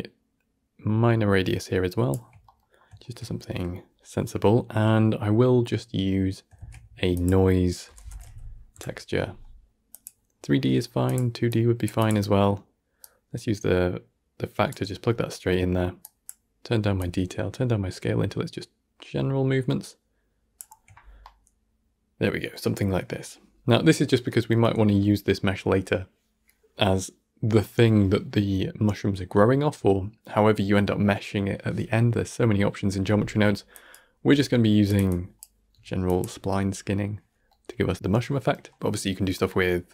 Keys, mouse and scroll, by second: 2.6-2.9 scroll up 1, 2.9-6.5 shift+middle drag, 6.5 shift+a, 21.1-22.6 middle drag, 22.6-22.9 scroll up 1, 22.9-38.7 middle drag, 39.5-39.9 middle drag.